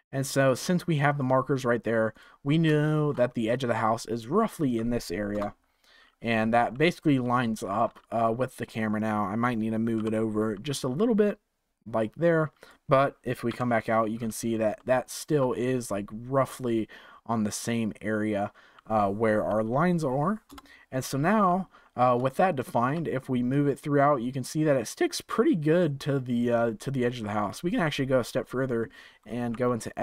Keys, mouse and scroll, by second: 1.1 scroll up 2, 2.1 click, 2.8-5.3 shift+middle drag, 5.3 KP_0, 6.6-7.3 scroll up 3, 7.3-9.9 shift+middle drag, 9.9 g, 13.4 KP_7, 14.1-14.7 scroll up 5, 14.7-15.5 shift+middle drag, 15.5-18.7 scroll down 4, 20.4 KP_0, 22.3-23.5 shift+middle drag, 23.5-26.5 drag, 29.5 Tab.